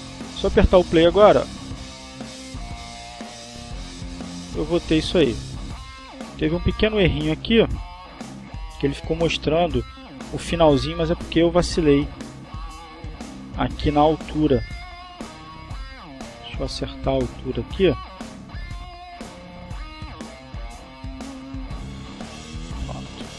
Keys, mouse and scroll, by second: 0.1 click, 1.2 click, 5.7 click, 7.1 click, 8.6-11.2 drag, 12.0 click, 12.7-16.5 drag, 16.6 click, 19.3-20.8 drag, 21.7-22.7 drag, 22.9-23.3 drag.